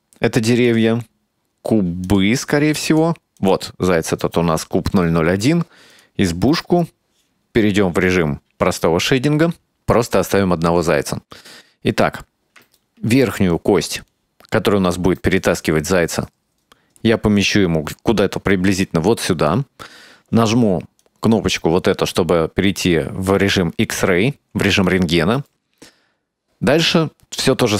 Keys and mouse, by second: 0.6 click, 2.1 click, 2.5 click, 2.9 click, 3.5 click, 6.0 click, 7.5 click, 11.4-12.6 right drag, 13.0 shift+middle click, 13.7-19.6 right drag, 21.1 click, 23.5 shift+middle click, 24.9-27.0 right drag.